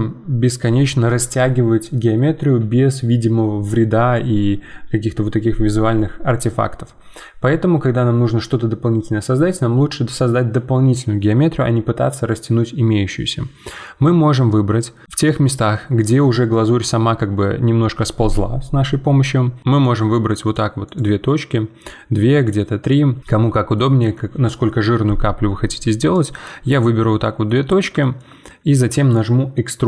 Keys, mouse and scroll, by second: 15.0-18.7 shift+middle drag, 19.8-21.0 drag, 23.2-26.1 shift+middle drag, 26.1-27.2 drag, 27.2-29.8 middle drag.